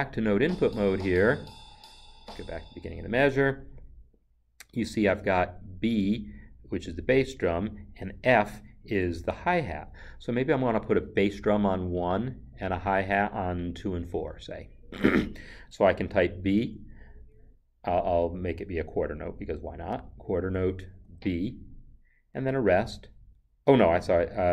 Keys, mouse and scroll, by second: 0.3 Left, 19.9 5, 21.0 b, 22.7 0.